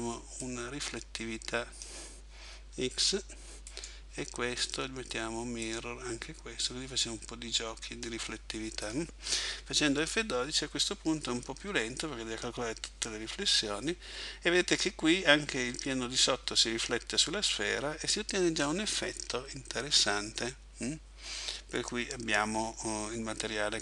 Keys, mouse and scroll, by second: 0.5 click, 3.7 right click, 5.7 click, 8.9 click.